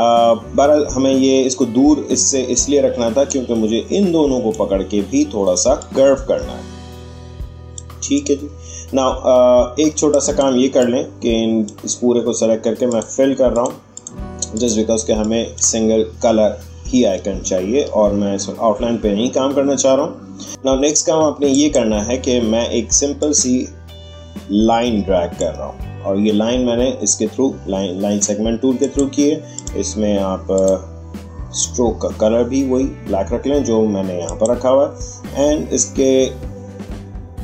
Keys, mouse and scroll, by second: 3.2 click, 3.2 shift+scroll down 1, 3.3-8.1 drag, 8.8-9.3 alt+scroll down 1, 9.9 space, 10.1-12.8 drag, 15.0 space, 15.2 click, 15.5 space, 17.4-18.1 alt+scroll up 1, 21.5-28.8 drag, 35.9 click.